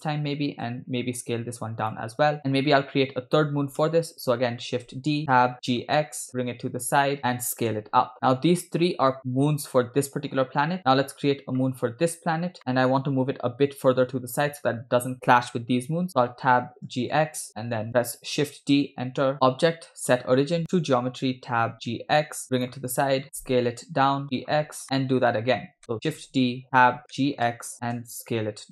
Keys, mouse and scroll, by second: 0.8 s, 2.4 scroll up 2, 4.0 Tab, 5.0 shift+d, 5.3 Tab, 5.7 g, 7.7 s, 8.1 scroll down 2, 9.4 Tab, 10.8 click, 12.6 shift+middle click, 12.9-14.4 scroll down 2, 14.5 scroll up 1, 16.2 Tab, 17.0 g, 17.7 Tab, 17.9 shift+middle click, 18.6 shift+d, 19.4-20.9 drag, 21.6 Tab, 22.0 g, 23.4 Tab, 23.4 s, 24.3 g, 24.7 scroll up 4, 25.3 shift+middle click, 25.8 Tab, 26.2 shift+d, 26.6 Tab, 26.6 g, 27.2 g, 28.0 s.